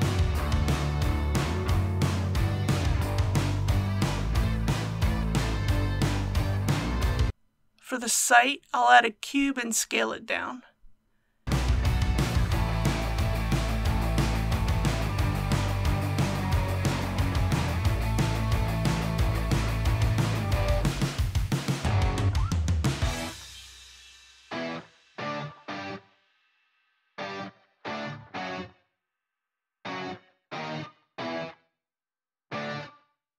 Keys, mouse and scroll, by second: 0.0 middle click, 0.2 scroll down 1, 1.2 click, 1.4 middle click, 1.6 scroll up 1, 1.8 click, 1.8 scroll down 1, 1.9 scroll up 1, 2.2 scroll down 1, 2.4-3.3 typing, 3.0 click, 3.6 click, 3.8 alt+a, 3.9 middle click, 4.4 scroll down 1, 4.6 KP_1, 4.8 scroll up 1, 7.0 shift+middle click, 7.5 shift+a, 8.9 click, 9.9 s, 12.4 click, 13.0 g, 13.6 shift+y, 17.3 click, 17.8 s, 22.5 g, 23.1 shift+y, 27.1 click, 27.7-29.7 middle drag, 31.0-31.6 typing.